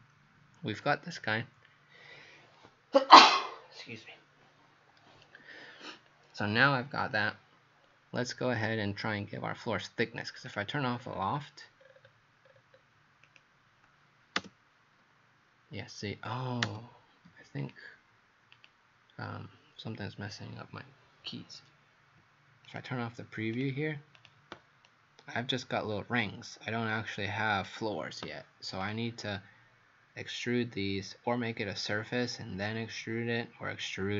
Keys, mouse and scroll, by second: 10.5 click, 10.9-11.4 scroll down 5, 11.9-12.7 scroll down 1, 13.3 scroll up 7, 13.3 click, 17.6 click, 22.7 right click, 23.6 click, 24.2 click, 24.9 right click, 28.8 click.